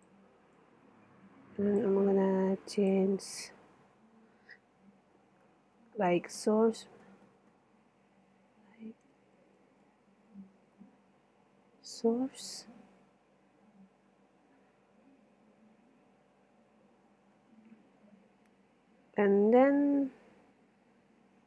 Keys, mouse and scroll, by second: 0.3 middle click, 0.5-2.5 drag, 2.5 middle click, 2.8 click, 2.9 middle click, 3.1 right click, 3.3 middle click, 4.6-7.0 middle drag, 7.3 middle click, 7.8-11.0 middle drag, 11.3 middle click, 11.8-12.9 middle drag, 13.1 middle click, 14.4 middle click, 17.7 middle click, 19.3 middle click, 20.1 middle click.